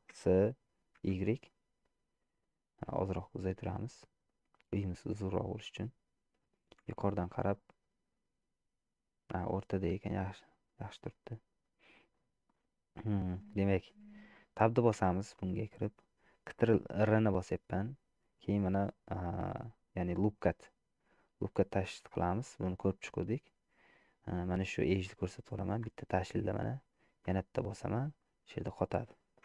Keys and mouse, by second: 0.2 s, 6.8 KP_7, 9.9 middle click, 11.3 middle click, 12.3 middle click, 13.3 shift+middle click, 15.1 Tab, 17.1 ctrl+r, 28.3 middle click.